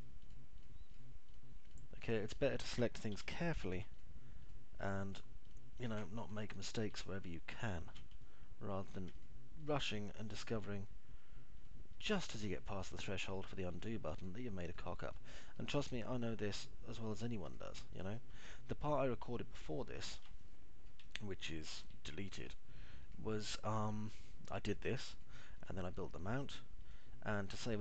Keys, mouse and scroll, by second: 1.3 ctrl+click, 1.8 ctrl+click, 3.8 q, 6.8 alt+middle click, 7.8 middle click, 8.8 alt+middle click, 10.7 ctrl+click, 15.2 ctrl+click, 15.7 click, 16.0 click, 17.7 click, 18.0 click, 19.0 click, 19.8 click, 21.0 middle click, 21.7 alt+middle click, 22.7 middle click, 23.7 ctrl+click, 24.7 ctrl+click, 25.2 ctrl+click, 27.3 click.